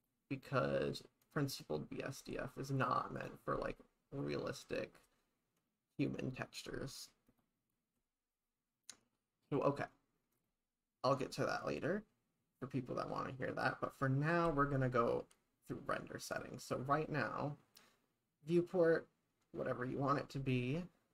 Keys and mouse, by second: 0.0 click, 3.2 click, 7.4 click, 10.4 click.